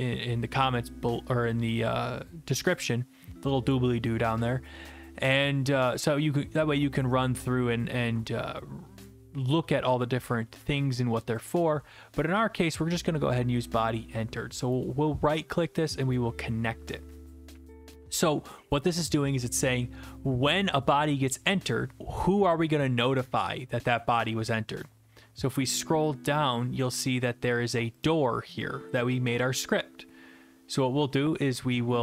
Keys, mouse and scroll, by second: 14.9 right click, 16.2 click, 25.6-26.1 scroll, 26.1-26.8 scroll down 7, 26.8-28.1 scroll down 3, 28.1 click, 28.1 scroll down 3.